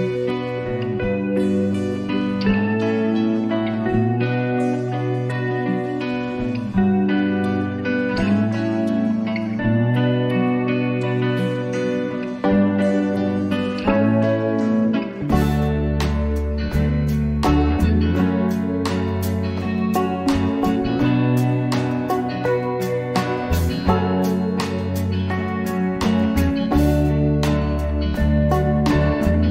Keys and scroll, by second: 13.0 ctrl+-, 17.6 ctrl+t, 28.4 ctrl++.